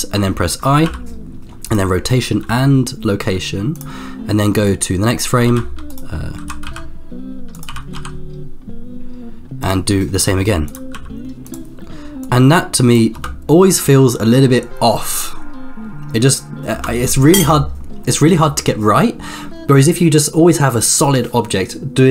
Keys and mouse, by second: 0.8 i, 2.4 i, 4.7 click, 5.5 shift+f, 6.4 g, 8.0 r, 10.2 i, 12.2 click, 12.2 i, 13.2 space, 16.8 space.